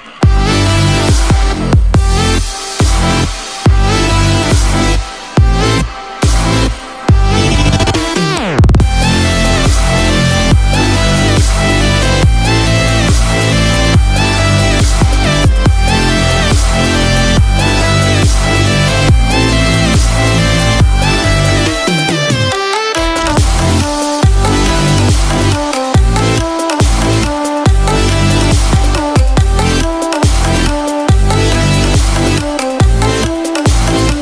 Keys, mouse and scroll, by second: 30.2 middle click, 30.5-30.9 scroll down 3, 31.1 middle click, 32.3 scroll up 1, 32.8-33.1 scroll down 1, 33.4 scroll up 1, 33.7-34.1 scroll down 1.